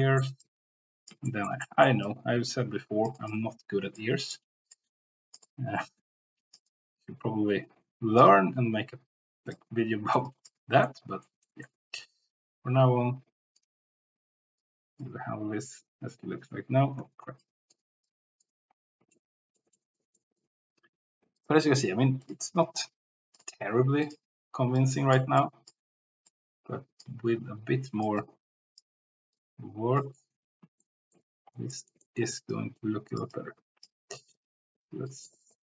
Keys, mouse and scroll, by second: 0.4-1.5 drag, 1.2 shift+middle click, 1.6 middle click, 2.0-3.3 drag, 4.0 click, 4.7 click, 9.6 click, 10.2 click, 10.9 middle click, 11.4 middle click, 13.5 click, 14.6-16.1 drag, 17.0 ctrl+z, 17.4 click, 18.0 click, 19.1 middle click, 20.1 middle click, 21.3 click, 22.2 click, 26.4-27.5 drag, 27.4 ctrl+z, 28.2 click, 29.4 click, 30.8 shift+middle click, 31.6 shift+middle click, 32.4 click, 33.3 click.